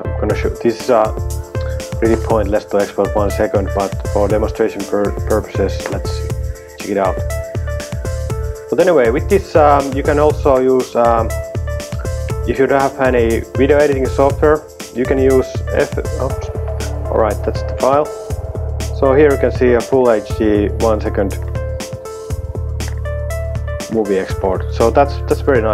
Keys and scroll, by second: 12.6 Escape, 12.8 Escape, 15.0 super+t, 15.6-16.7 typing.